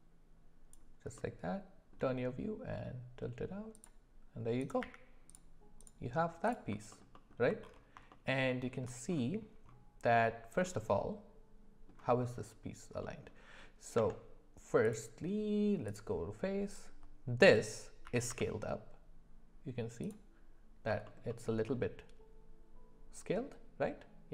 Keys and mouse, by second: 1.1 middle click, 4.6 click, 4.8 q, 6.9 alt+middle drag, 7.1 alt+middle click, 8.1 shift+middle click, 10.6-11.9 middle drag, 13.0 middle click, 13.9 Tab, 14.8 click, 18.0 s, 21.3 alt+middle click.